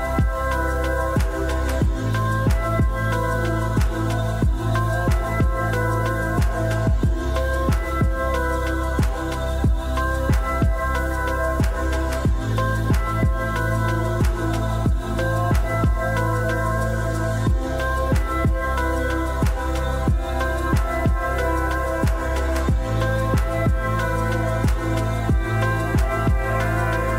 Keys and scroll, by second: 5.9-7.4 typing, 20.9 1, 25.9-26.9 typing.